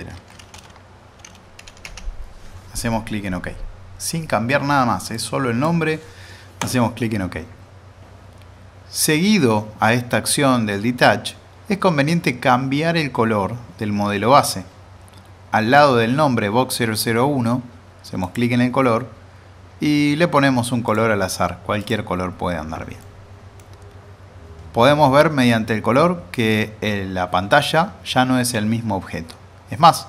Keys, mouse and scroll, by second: 0.1 typing, 3.0 typing, 5.1-5.7 drag, 18.2 click, 23.0-23.6 middle drag.